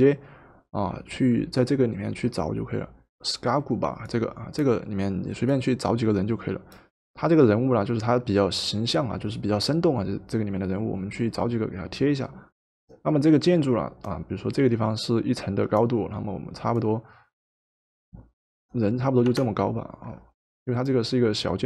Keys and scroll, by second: 19.3 Return.